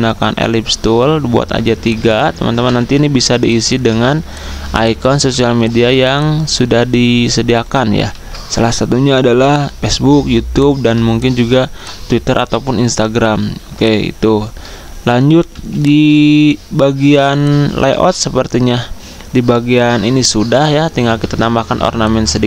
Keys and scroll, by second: 1.6 z, 2.6 i, 3.8-5.2 typing, 8.1 ctrl+d, 15.5 z.